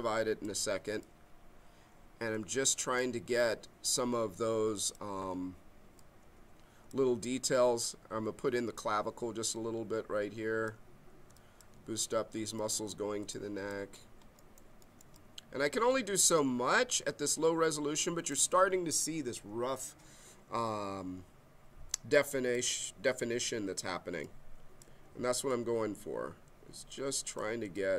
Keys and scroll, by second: 24.1 b.